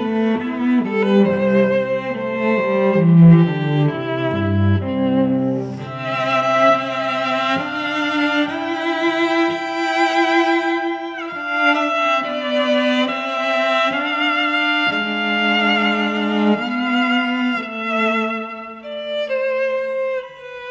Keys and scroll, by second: 1.2 ctrl+Return, 3.2-4.8 typing, 4.4 ctrl+Return, 5.6 ctrl+t, 8.2 Return, 8.4 v, 8.7 shift+Left, 10.0 shift+Right, 12.0 t, 12.9 -, 13.4 ctrl+Return, 13.8 v, 14.5 shift+Right, 16.7 shift+Left, 17.7 shift+Down, 17.9 shift+Left, 18.4 shift+Right, 20.0 shift+Left, 20.5 space.